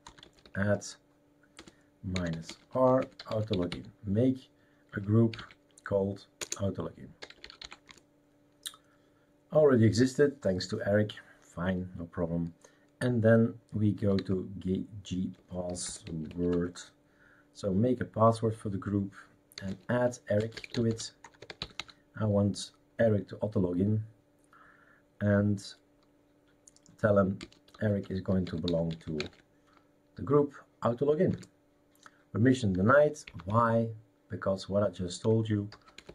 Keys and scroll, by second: 0.0-8.1 typing, 6.5 Return, 13.7-16.8 typing, 19.3-22.2 typing, 27.4-29.9 typing, 31.3 Return, 33.2 Up, 33.4 Left, 34.0 Left, 34.1-35.2 Left, 35.3 Left, 35.4-36.1 typing.